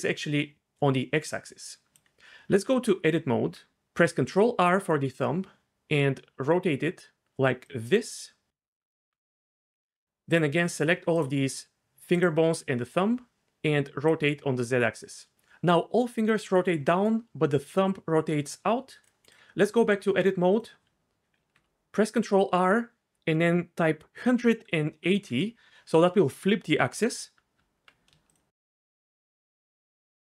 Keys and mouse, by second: 2.6 Tab, 4.2 ctrl+r, 7.6 click, 8.5 Tab, 14.2 click, 19.1 click, 19.8 Tab, 21.4 ctrl+r, 24.4 KP_1, 24.9 KP_8, 25.1 KP_0, 25.3 KP_Enter, 27.6 Tab, 28.6 shift+click.